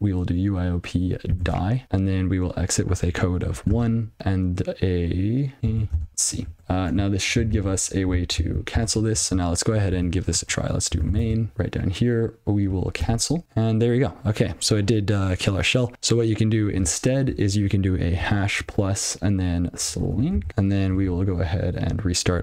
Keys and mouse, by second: 1.4 d, 1.8 space, 4.2 space, 5.6 a, 5.6 ctrl+f, 5.9 space, 6.6 ctrl+c, 8.7 ctrl+n, 9.7 alt+p, 10.5-11.6 typing, 11.5 click, 19.6-20.8 typing, 21.0 alt+x, 22.3 ctrl+g.